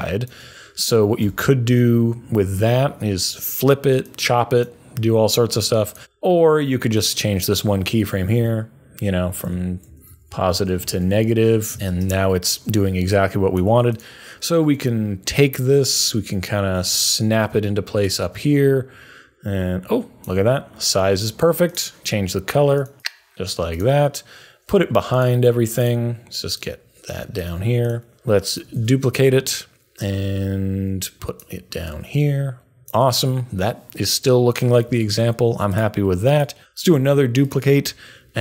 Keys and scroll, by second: 1.2 u, 8.3 Left, 9.2-12.4 typing, 10.8 super+a, 13.6 typing, 24.7 super+a, 28.7 super+d, 36.8 super+d.